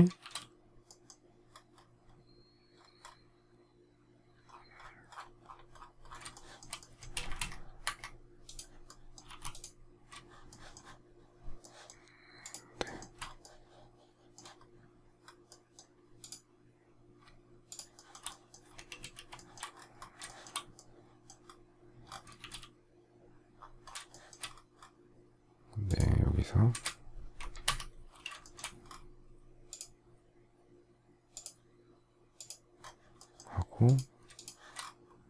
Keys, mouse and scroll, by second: 0.1 shift+x, 6.3 shift+middle click, 7.1 space, 7.2 Escape, 9.2 m, 10.4 shift+middle click, 11.5 shift+middle click, 12.4 shift+click, 12.8 shift+middle click, 13.2 shift+double middle click, 17.6 shift+click, 17.9 shift+middle click, 18.9 space, 19.3 shift+middle click, 20.2 shift+middle click, 22.3 shift+x, 24.0 shift+middle click, 27.6 Escape, 28.3 shift+middle click, 34.3 shift+click.